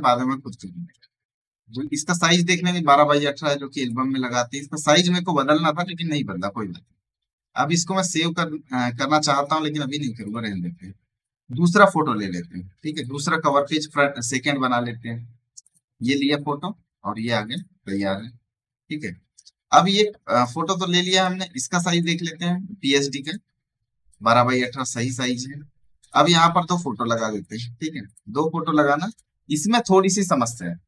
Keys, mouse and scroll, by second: 1.8 click, 7.9-17.5 drag, 18.9 alt+scroll down 1, 20.2 click, 20.7 space, 20.8 right click, 21.0 click, 25.6 space, 25.7 right click, 25.9 click, 27.6 space, 27.8 right click, 28.0 click.